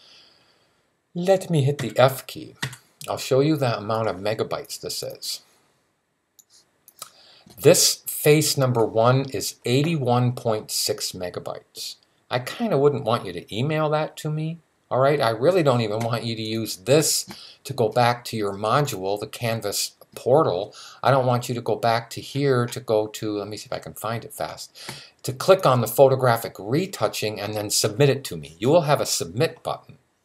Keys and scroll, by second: 1.6-2.4 typing.